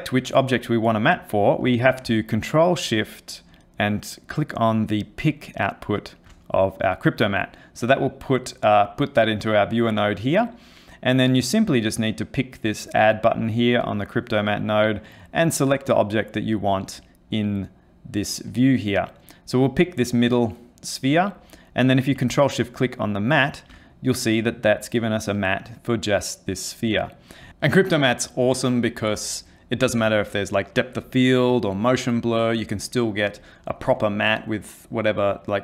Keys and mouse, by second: 5.5 ctrl+shift+click, 13.1 click, 22.9 ctrl+shift+click, 24.1 middle click.